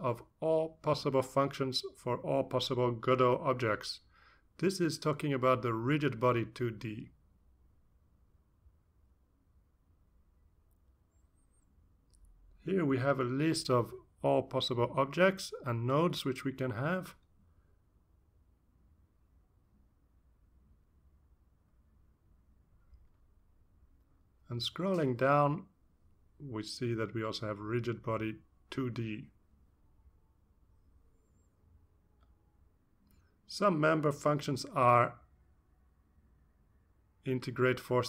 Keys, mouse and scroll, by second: 4.8-5.2 scroll down 1, 6.9-8.1 drag, 8.2-8.5 scroll down 1, 9.6-10.9 scroll down 3, 13.9-15.4 scroll down 4, 15.8-18.7 scroll down 11, 19.2-19.6 scroll down 1, 20.0-21.2 scroll down 5, 21.6-22.7 scroll down 6, 23.1-24.7 scroll down 8, 25.7-26.1 scroll down 2, 26.6-27.9 scroll down 4, 28.1 scroll down 1, 28.8 scroll down 1, 29.5-30.7 scroll down 3.